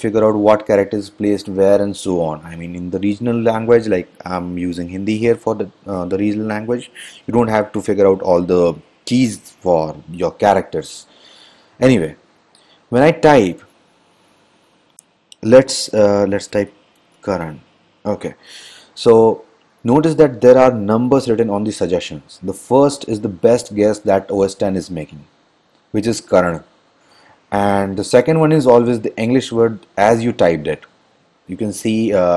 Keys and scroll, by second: 13.6 Return, 13.8 Return, 16.5-18.2 typing.